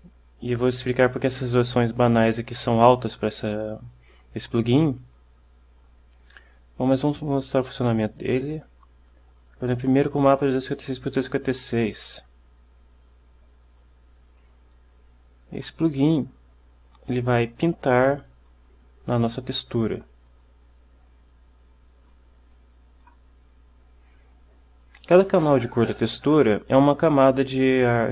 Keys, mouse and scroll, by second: 6.3 click, 8.1 click, 13.0-14.1 drag, 14.6-16.4 drag, 16.4-18.8 drag, 20.4 click, 21.2-22.4 drag, 22.6 click, 24.9 click.